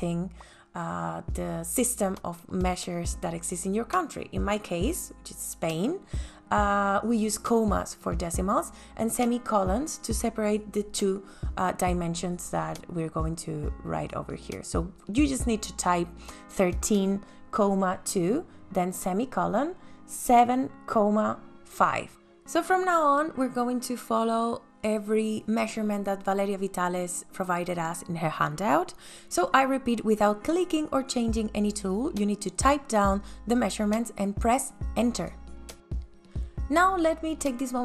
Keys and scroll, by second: 13.6 KP_1, 14.0 KP_3, 14.3 ,, 15.0 KP_2, 16.4 shift+,, 18.6 KP_7, 19.2 ,, 19.6 KP_5, 20.6 KP_Enter, 25.1 space, 26.8 ctrl+s.